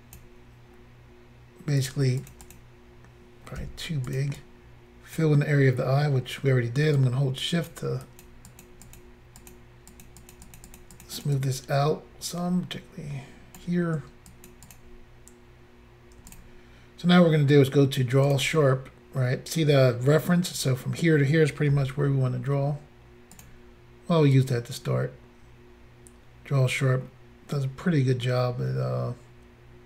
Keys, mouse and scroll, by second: 1.8 click, 2.3 double click, 2.4 double click, 2.5 double click, 3.6 f, 4.1 click, 4.2 click, 4.4 click, 7.0 shift+click, 8.1 shift+click, 8.2 shift+click, 8.5 shift+click, 8.6 shift+double click, 8.9 shift+click, 9.0 shift+click, 9.4 shift+click, 9.5 shift+click, 9.9 shift+click, 10.1 shift+click, 10.2 shift+click, 10.4 shift+double click, 10.5 shift+click, 10.6 shift+click, 10.7 shift+click, 10.8 shift+double click, 11.0 shift+click, 11.1 shift+click, 11.2 shift+click, 11.3 shift+double click, 11.4 shift+click, 14.3 shift+click, 14.5 shift+click, 14.7 shift+click, 14.8 shift+double click, 16.3 shift+click, 16.4 shift+click, 18.3 click, 18.4 click, 21.8 f, 23.4 click, 23.4 click, 24.3 click.